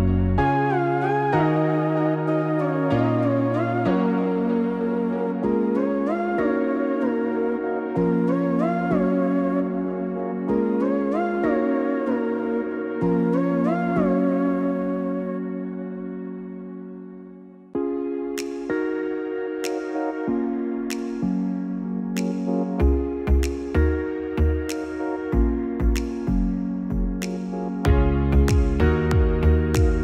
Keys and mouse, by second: 1.3 KP_1, 6.1-7.6 drag, 9.1-14.1 drag, 17.6 Tab, 19.2-20.5 middle drag, 21.1 KP_1, 23.8 click, 25.7 KP_6, 26.2 KP_6, 29.0-30.0 drag.